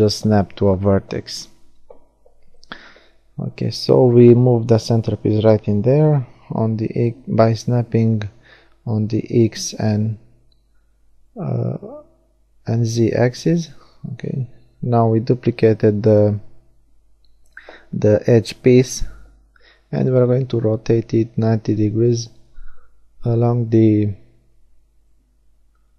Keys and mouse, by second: 4.0-5.6 drag, 8.2 shift+d, 8.8-11.4 drag, 12.6 r, 21.5-24.3 drag, 24.3-25.4 middle drag.